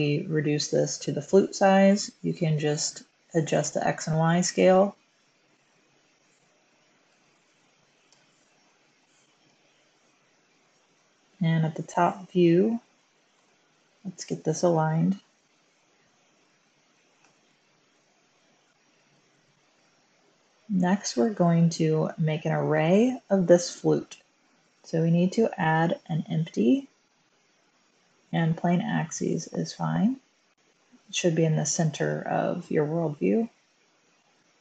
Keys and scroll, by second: 5.9-8.7 typing, 7.2 Tab, 9.4 Return, 11.0 7, 13.2 typing, 16.0 g, 17.1 g, 17.8 x, 19.8 Tab, 19.8 1, 32.9 typing.